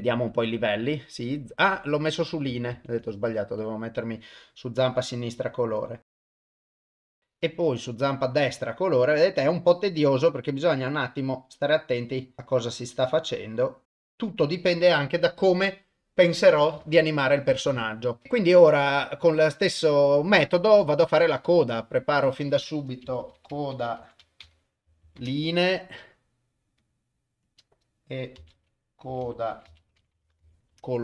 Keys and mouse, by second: 2.7 ctrl+z, 3.6 click, 6.1 click, 8.1 click, 9.3-14.4 drag, 21.4 click, 22.2-25.2 drag, 25.0 e, 26.8 click, 27.6-30.8 drag.